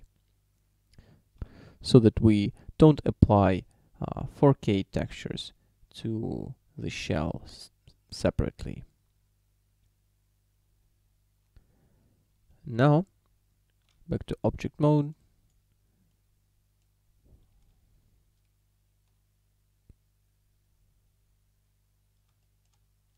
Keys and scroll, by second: 1.6 shift+d, 13.1 Tab, 18.0 z.